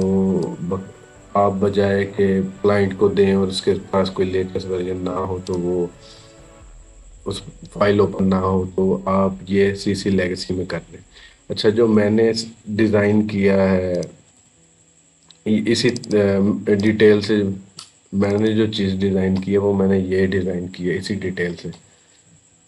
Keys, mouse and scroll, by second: 5.3 click, 11.1 click, 13.7 click.